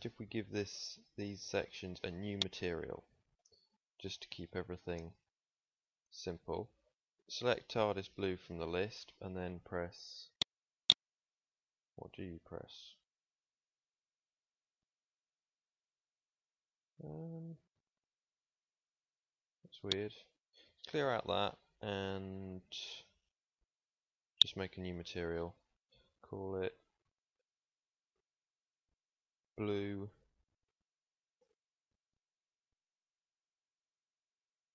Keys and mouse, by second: 0.7-5.1 middle drag, 5.1-34.7 drag.